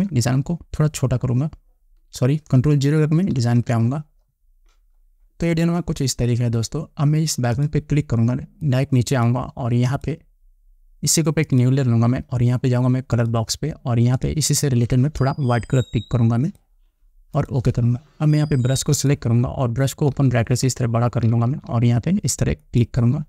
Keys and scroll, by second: 0.4 ctrl+-, 4.0 ctrl+0, 20.7 ].